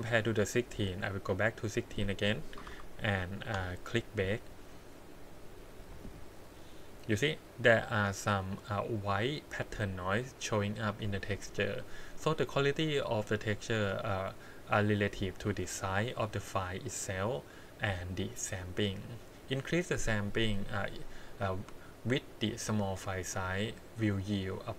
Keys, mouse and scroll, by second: 1.8-3.5 drag, 1.8-2.6 scroll down 1, 4.2-4.8 scroll up 3, 5.3 click, 15.4 click, 16.1-17.9 drag, 18.5-19.1 scroll down 4, 20.3 scroll down 2, 22.4-23.5 drag, 24.3-24.7 scroll up 7.